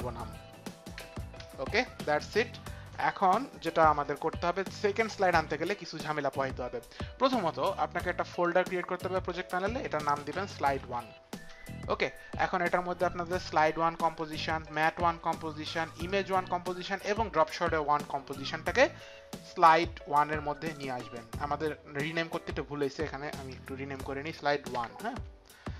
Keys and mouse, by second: 1.0 KP_1, 1.0 e, 1.4 Return, 8.3 click, 9.9-11.5 typing, 13.5-14.2 typing, 13.7 click, 14.6 ctrl+click, 16.0 ctrl+click, 17.5 ctrl+click, 19.0 click, 24.7 KP_1, 25.1 Return.